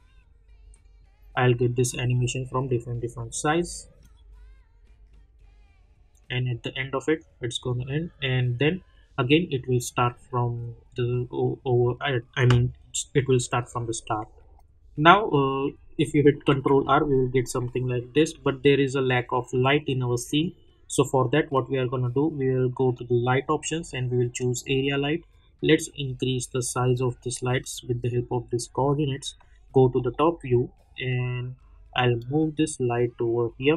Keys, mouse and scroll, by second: 1.9 click, 9.8 click, 14.5 click, 16.4 ctrl+r, 20.2 click, 22.9-27.6 drag, 26.0-26.7 drag, 27.9-29.1 drag, 29.3 middle click, 30.4 scroll down 1, 32.2-33.5 drag, 33.5 scroll down 1.